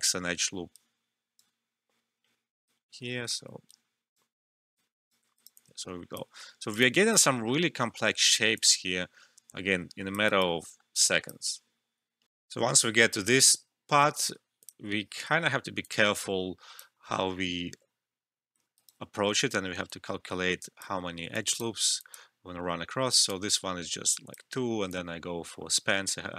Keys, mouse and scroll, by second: 5.5 alt+click, 6.3 alt+middle click, 6.6 alt+right click, 6.8 alt+click, 7.3 alt+middle click, 8.5-10.2 alt+drag, 10.2 alt+right click, 10.6 alt+middle click, 10.9-12.3 alt+drag, 12.3 alt+F12, 14.6-18.7 drag, 18.7 alt+right click, 20.1 click, 21.9-26.3 alt+drag, 23.5 click.